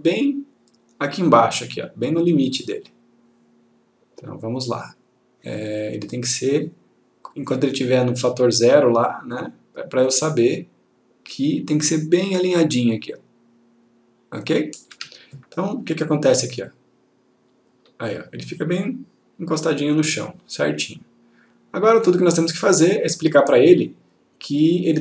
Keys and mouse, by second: 5.7-6.9 click, 9.1-14.4 click, 15.0 F1, 16.8 click, 22.4 click.